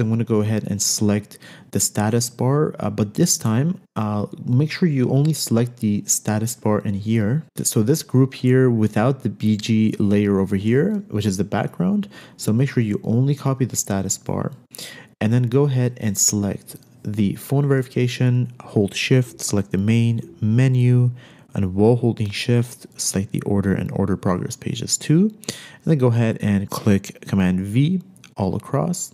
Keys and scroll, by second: 12.8 super+c, 27.7 super+v.